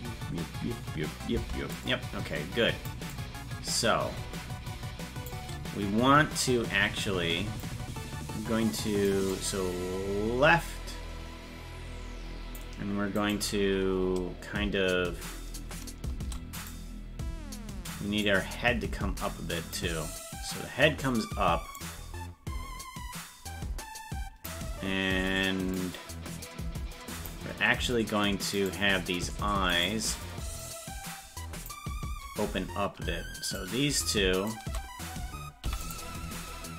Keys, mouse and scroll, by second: 1.8-2.9 drag, 1.8 space, 3.1-5.3 drag, 7.6-9.1 drag, 9.3-12.6 drag, 13.3 right click, 16.6-18.2 right drag, 18.2-19.7 drag, 21.7-24.5 drag, 25.7-27.3 drag, 28.8 right click, 29.9 shift+right click, 30.6-31.7 drag, 33.6 right click, 34.6 shift+right click, 35.6 i.